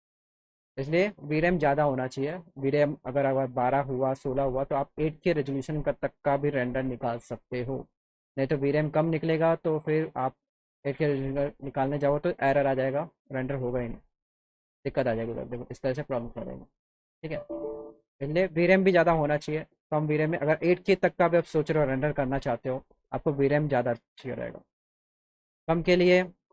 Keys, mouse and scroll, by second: 6.0-7.0 drag, 9.2 click, 16.9 click, 17.8 click.